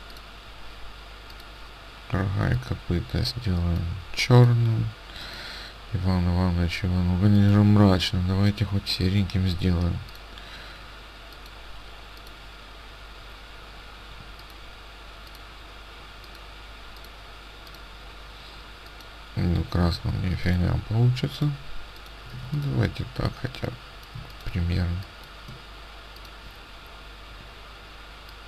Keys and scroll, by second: 19.9 ctrl+z, 22.5 ctrl+alt+space.